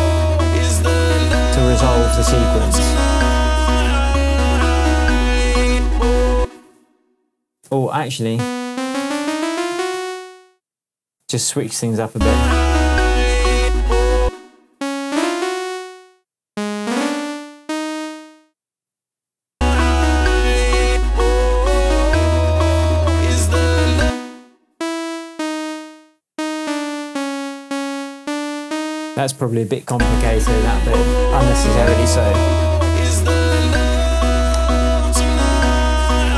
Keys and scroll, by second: 6.3 space, 7.6 p, 8.7 Up, 14.2 space, 24.0 space, 29.9 alt+space.